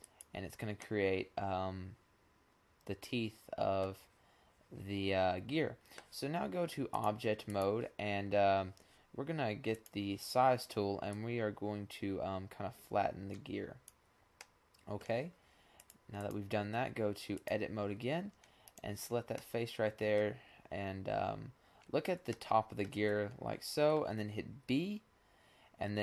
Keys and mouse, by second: 0.5-2.6 middle drag, 10.3 click, 14.0-15.4 middle drag, 15.7 click, 17.1 click, 18.2 click, 18.4-24.3 middle drag, 24.3 b.